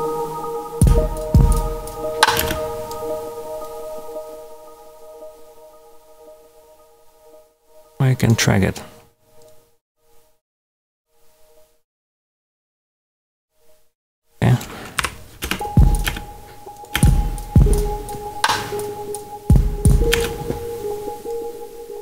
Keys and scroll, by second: 0.6 space, 2.3 space, 14.9 Delete, 15.4 space, 20.0 space.